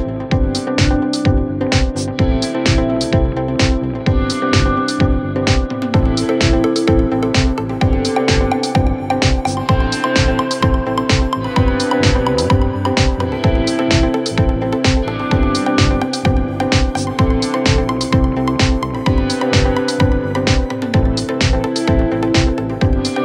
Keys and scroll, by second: 5.6 ctrl+Page_Down, 6.9 F3, 7.1 Escape, 16.5 ctrl+z, 18.2 shift+F2, 20.8 F2.